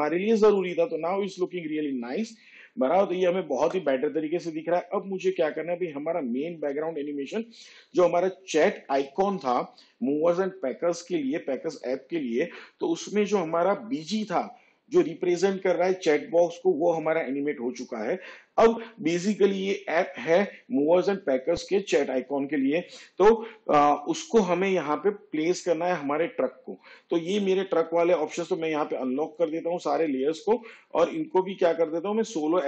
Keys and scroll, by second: 6.0 space.